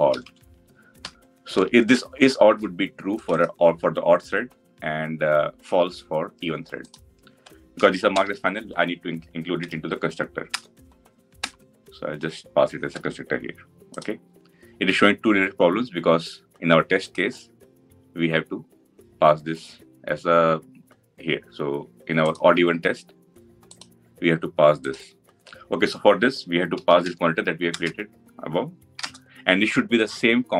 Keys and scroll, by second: 9.5 alt+Insert, 27.5 Return.